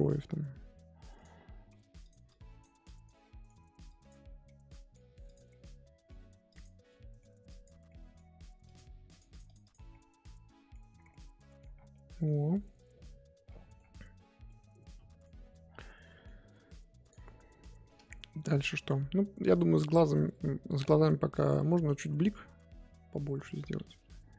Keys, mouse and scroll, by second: 1.2 click, 1.3-1.7 scroll up 2, 1.7 f, 2.3 click, 3.2 middle click, 3.9 click, 4.5 middle click, 5.3 click, 5.5-6.5 middle drag, 6.5 click, 6.9 middle click, 7.5 click, 7.9 middle click, 8.6-9.9 drag, 9.9-10.9 middle drag, 10.9 scroll down 2, 11.0 scroll up 1, 11.1 middle click, 11.7 scroll down 1, 11.9 middle click, 12.6-13.5 scroll up 3, 13.5 middle click, 13.9-14.4 scroll up 2, 14.4 scroll up 1, 14.5 middle click, 15.2 scroll up 1, 15.4-16.0 scroll down 4, 16.0-17.1 middle drag, 17.1-19.4 drag, 19.4-21.5 middle drag, 21.5-23.9 scroll up 6, 23.9 KP_1, 24.3 scroll up 1.